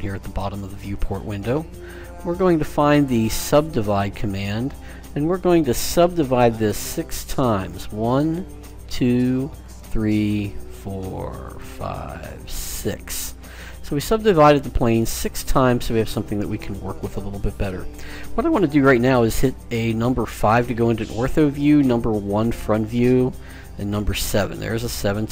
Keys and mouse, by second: 2.9-5.4 drag, 7.8-13.2 drag, 13.8 click, 14.4-16.3 middle drag, 20.5 KP_5, 22.1 KP_1, 24.0 KP_7.